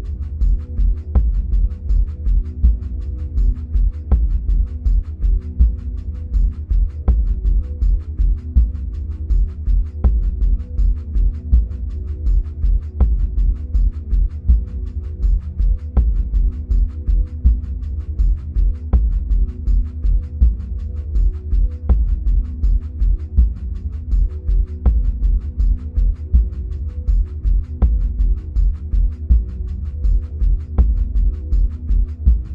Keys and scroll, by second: 15.1 ctrl+c, 15.5 ctrl+v.